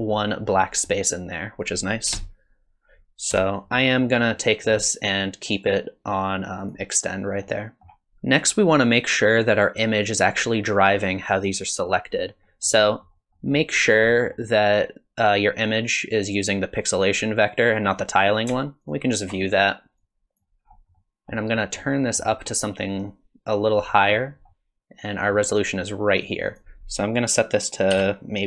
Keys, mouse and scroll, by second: 1.6 click, 4.3 middle click, 5.5 click, 7.4 middle click, 12.4 middle click, 12.8 middle click, 13.3 middle click, 14.1 middle click, 16.5 click, 18.9 ctrl+shift+click, 20.0 click, 20.7-21.1 scroll up 4, 20.9 middle click, 21.3-21.8 scroll down 2, 21.5 middle click, 22.0 middle click, 22.4-23.4 scroll up 3, 23.9 middle click, 24.5 middle click, 26.5 click.